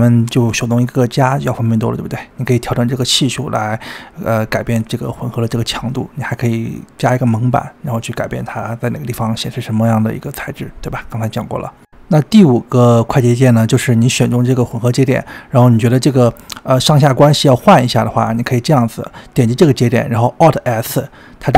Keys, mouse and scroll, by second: 0.0 scroll up 1, 0.1-5.5 drag, 9.1-11.0 drag, 11.0-12.1 middle drag, 12.1 scroll down 2, 12.3-13.3 middle drag, 13.3-14.8 drag, 14.8-15.9 middle drag, 15.9-17.2 drag, 18.9-21.1 scroll up 1.